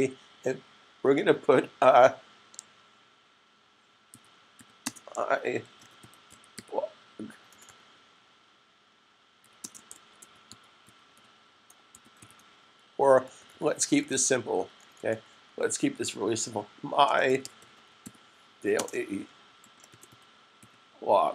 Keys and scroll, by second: 4.0-7.5 typing, 9.1-15.3 typing, 16.8-20.9 typing.